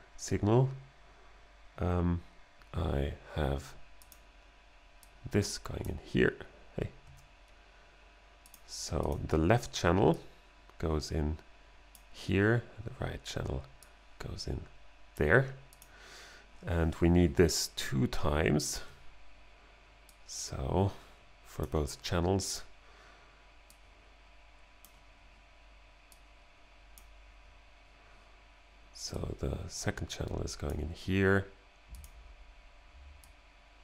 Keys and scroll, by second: 7.1 BackSpace.